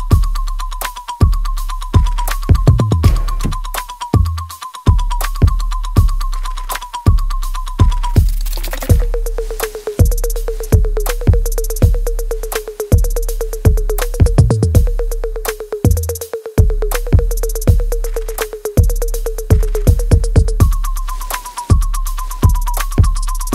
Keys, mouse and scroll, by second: 0.1 alt+right click, 0.6 alt+click, 1.0 alt+middle click, 1.6 alt+right click, 2.7 ctrl+b, 3.5-5.1 alt+right drag, 5.1-10.0 ctrl+drag, 10.0-11.5 drag, 11.5-13.3 alt+right drag, 13.3-19.1 ctrl+drag, 19.1 right click, 19.7 click, 20.5 click, 20.8 alt+right click, 21.6 alt+right click, 22.4 click, 22.9 alt+click.